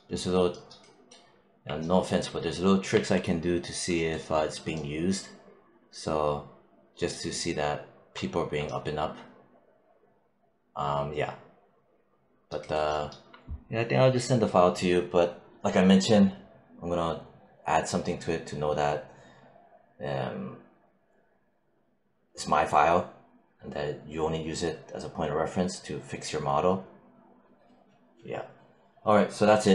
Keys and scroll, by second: 2.8 1.